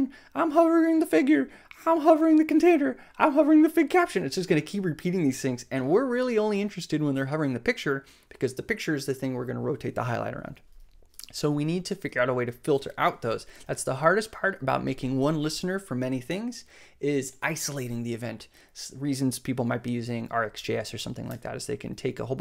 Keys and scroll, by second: 20.8 f, 21.2 BackSpace.